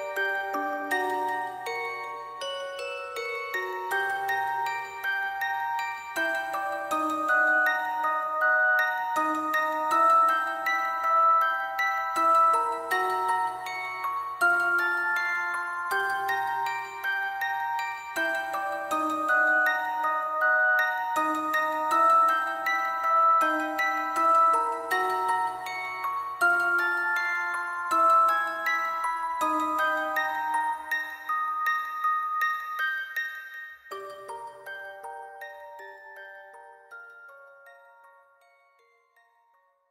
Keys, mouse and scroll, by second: 1.3 alt+click, 1.7 alt+click, 2.4 middle click, 3.6 shift+click, 4.6 double click, 5.1 alt+click, 5.9 alt+click, 8.0 ctrl+z, 9.3 alt+click, 11.2 double click, 11.5 alt+click, 11.8 alt+click, 12.1 alt+click, 12.2 alt+click, 13.2 alt+click, 13.4 alt+click, 13.5 alt+click, 15.3 alt+click, 16.8 double click, 18.4 ctrl+click, 19.7 alt+click, 20.2 double click, 20.4 ctrl+click, 20.5 shift+click, 21.1 alt+click, 21.9 ctrl+click, 22.0 shift+click, 22.5 alt+click, 23.4 alt+click, 23.9 alt+click, 24.2 ctrl+click, 24.4 shift+click, 24.7 shift+click, 24.9 alt+click, 25.1 alt+click, 25.3 shift+click, 26.6 double click, 26.8 ctrl+click, 26.9 shift+click, 27.1 alt+click, 27.3 alt+click, 27.4 shift+click, 27.5 alt+click, 28.0 alt+click, 28.5 alt+click, 29.5 alt+click, 29.6 alt+click, 30.7 alt+click, 31.6 alt+click, 31.8 alt+click, 32.0 alt+click, 32.3 alt+click.